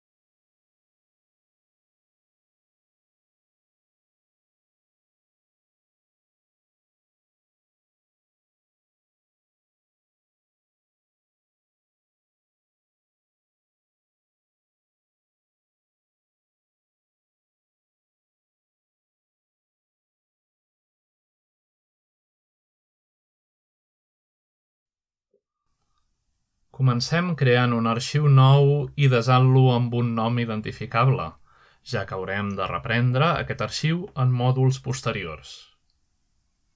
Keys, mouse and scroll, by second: 0.5 typing, 0.6 click, 4.5-5.0 middle drag, 4.7-5.3 scroll down 2, 5.2 shift+middle click, 5.7 shift+click, 8.2 click, 8.6 s, 11.4 right click, 12.5 ., 14.6 click, 15.1 s, 20.4 click, 25.0 Escape, 30.9 ctrl+n, 31.9 click, 33.1 click, 35.1 click, 36.5 click.